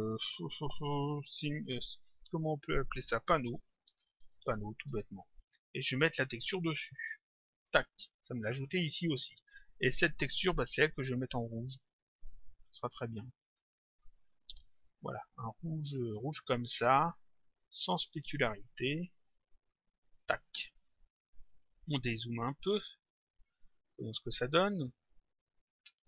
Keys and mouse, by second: 3.2-4.9 typing, 4.9 Return, 6.4 click, 10.5 click, 13.5 click, 17.1 click, 19.1 click, 23.7 click.